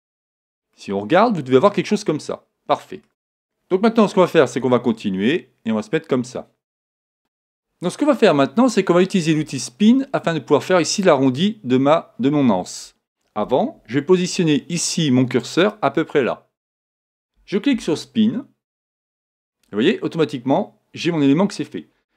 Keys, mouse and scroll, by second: 0.7-2.6 middle drag, 4.6 e, 7.2-8.5 right drag, 15.6-17.5 drag, 19.2-21.1 drag.